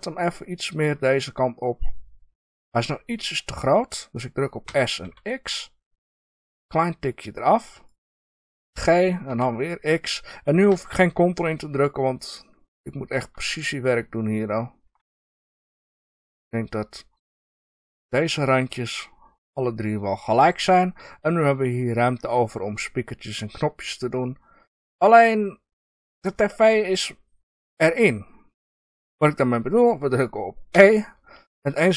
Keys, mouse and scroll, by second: 2.5 click, 4.6 s, 7.9 click, 8.6 g, 17.4-20.4 drag, 20.4 scroll down 1, 20.9 scroll up 1, 23.5-28.3 middle drag, 27.8 scroll down 1, 28.3-30.6 scroll up 1, 30.6 e.